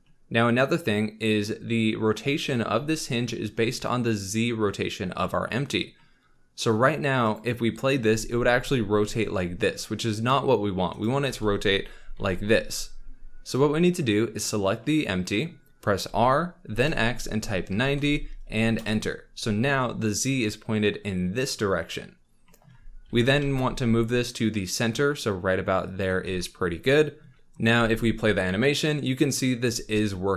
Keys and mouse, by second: 7.2 click, 7.9 r, 8.0 z, 11.2 r, 12.2 y, 14.3 click, 16.0 r, 16.8 x, 17.7 KP_9, 17.9 KP_0, 18.8 Return, 23.0 g, 23.1 x, 23.4 y, 27.7 space.